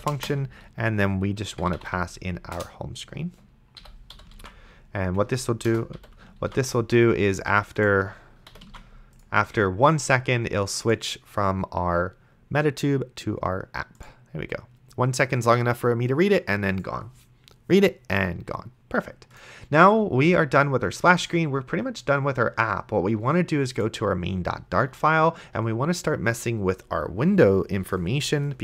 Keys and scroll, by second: 0.2 space, 1.5-2.4 typing, 2.6 Return, 3.8 End, 4.1 ;, 4.6 ctrl+s, 5.7 BackSpace, 6.0 ,, 6.7 ctrl+s, 8.5 ,, 9.0 ctrl+s.